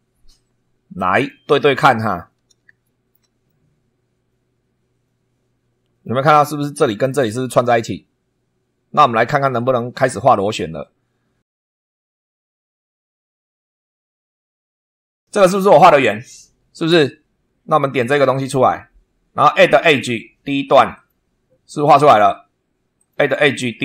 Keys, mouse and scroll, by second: 1.1 click, 2.2-2.7 scroll up 1, 2.8 shift+right click, 3.4-6.2 shift+right drag, 12.1 click, 14.0 click, 15.7 click, 18.4 click, 19.8 click, 20.9 click, 22.9 click.